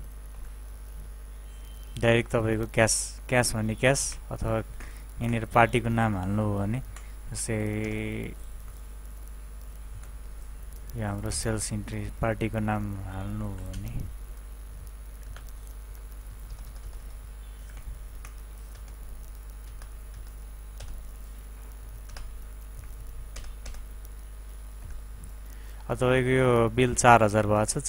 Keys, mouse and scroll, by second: 0.3 End, 6.9 F2, 7.8 Return, 9.9 F2, 11.3 Return, 12.6-13.7 typing, 14.8-16.3 typing, 16.5 Return, 17.6 ctrl+w, 18.7 Return, 24.8 End.